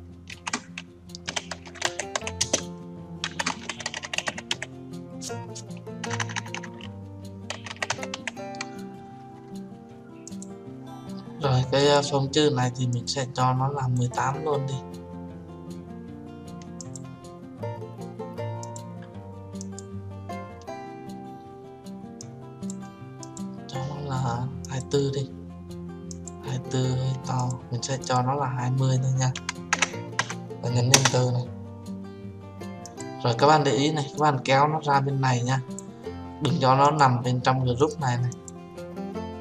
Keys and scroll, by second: 30.9 Return.